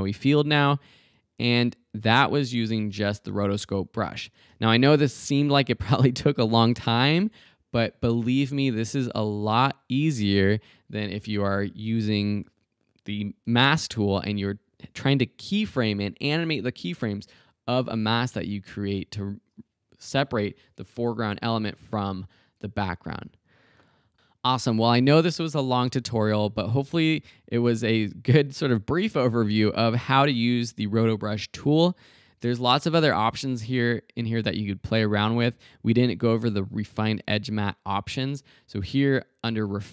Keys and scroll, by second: 3.3 space.